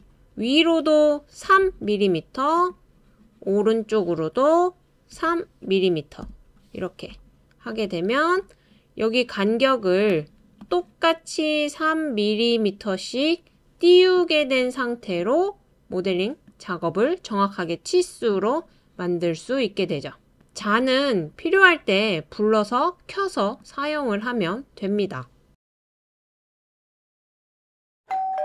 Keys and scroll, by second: 1.4 typing, 5.1 typing, 6.2 typing, 28.0 BackSpace.